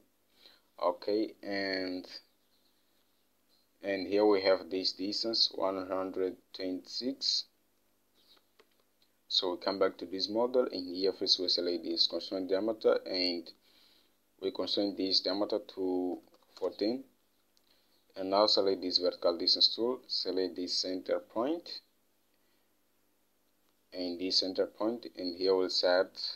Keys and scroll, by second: 8.8 alt+Tab, 16.4-17.3 typing.